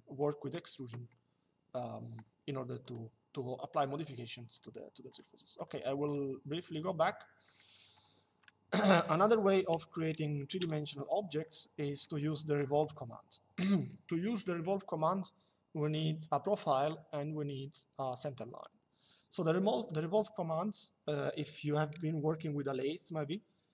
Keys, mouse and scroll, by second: 2.5 click, 7.1 middle click, 10.3 Delete, 11.1 middle click.